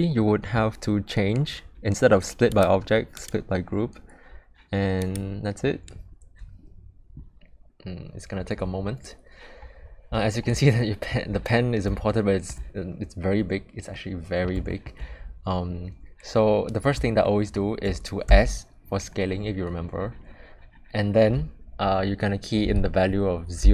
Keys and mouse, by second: 10.8-11.1 shift+middle drag, 12.1-12.5 shift+middle drag, 13.9 middle click, 14.7 shift+middle drag, 17.2-17.6 shift+middle drag, 18.3 s.